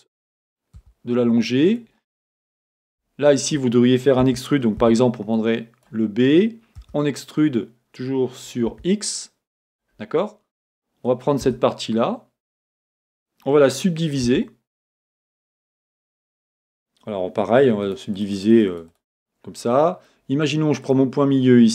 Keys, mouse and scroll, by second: 1.7 click, 1.8-6.9 middle drag, 4.2 a, 4.8 b, 6.9 e, 9.8 click, 11.4 b, 14.2 middle click, 14.2 w, 14.9-17.8 right drag, 17.8-19.1 drag, 19.7-20.8 middle drag, 20.8 click.